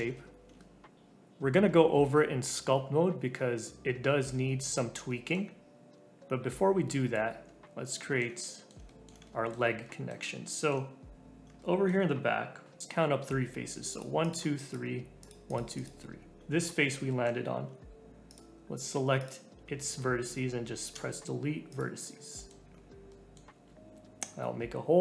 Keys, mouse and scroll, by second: 0.7 right click, 0.9 scroll down 4, 1.5-1.9 scroll up 3, 1.8 right click, 3.3-7.3 middle drag, 7.3 Tab, 7.5-8.0 scroll up 2, 8.0-11.4 shift+middle drag, 11.4 scroll up 2, 11.6-13.4 shift+middle drag, 13.9 click, 14.2 click, 14.5 click, 15.2 click, 15.4 click, 15.7 click, 16.4-16.9 scroll up 2, 16.9-18.3 shift+middle drag, 18.3 shift+click, 19.1 shift+click, 20.9 Delete, 22.2 middle click, 22.6 scroll down 2, 23.1 middle click, 23.6 alt+z, 24.0 alt+z.